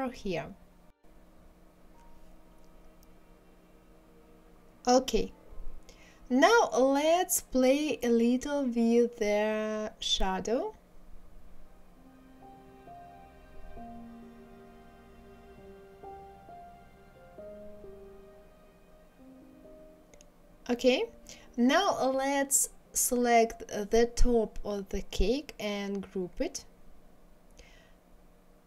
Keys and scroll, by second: 18.4 ctrl+z, 26.0 ctrl+z.